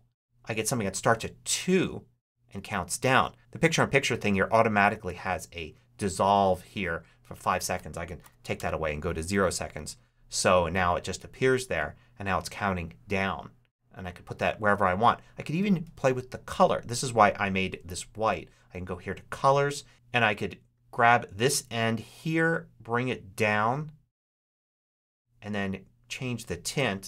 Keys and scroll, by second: 8.1 0, 8.4 Return.